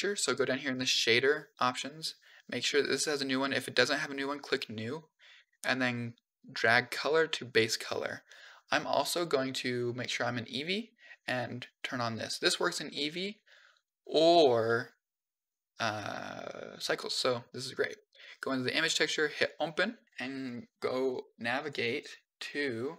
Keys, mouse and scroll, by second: 1.5 scroll up 2, 1.7 middle click, 6.3-7.4 drag, 9.0 click, 11.8 click, 14.5-15.4 middle drag, 15.6-17.0 scroll up 3, 18.0 click, 19.2 click.